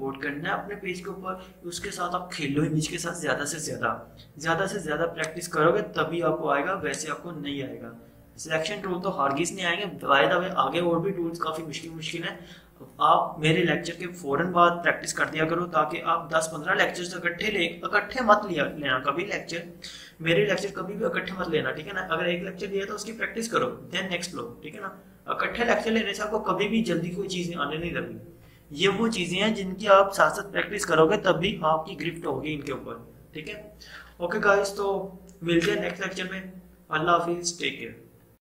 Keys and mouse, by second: 5.2-10.2 drag.